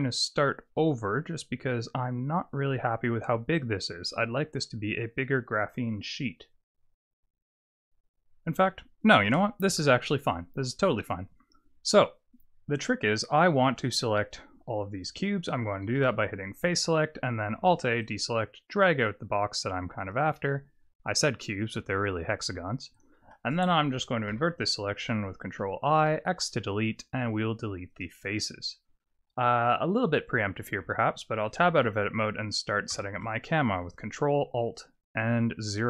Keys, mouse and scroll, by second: 8.5 Tab, 9.2 Tab, 9.7 KP_7, 10.6-11.1 scroll up 4, 11.1-12.3 scroll down 3, 15.9 3, 17.5 alt+a, 18.0 click, 24.3 ctrl+i, 26.0 x, 30.8 Tab, 32.9 ctrl+alt+KP_0, 35.7 click.